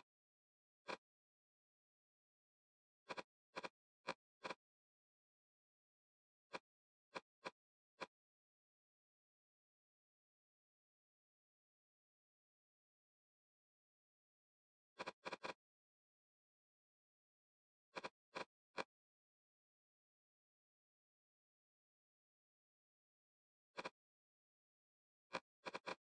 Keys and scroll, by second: 1.2-2.2 typing, 5.5 Return, 14.5 d, 16.1 Escape, 17.5 d, 19.1 Escape, 23.5 Escape, 24.3 BackSpace.